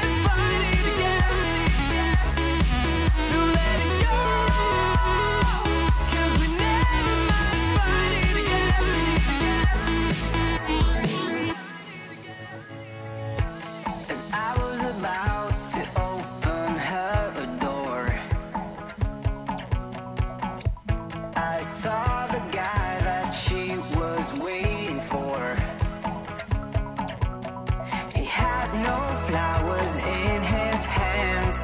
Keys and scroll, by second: 5.1 super+z, 20.5 alt+shift+Up, 21.0 alt+shift+Up, 21.5 alt+Up, 21.7 alt+Up, 24.3 shift+super+2, 26.1 alt+Down, 26.3 alt+Down, 26.8 alt+Down, 27.3 alt+Down.